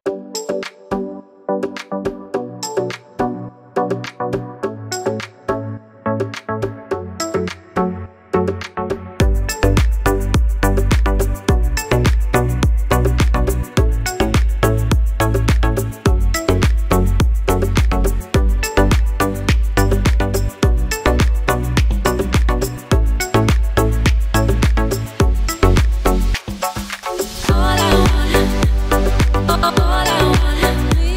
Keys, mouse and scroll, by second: 7.6 click, 10.7 scroll down 1, 12.0 click, 12.4 scroll up 1, 13.7 click, 16.2 click, 19.2 scroll up 1, 19.3 click, 21.3-21.7 scroll up 1, 21.9 click, 24.0 scroll up 1, 25.3 click, 27.8 click.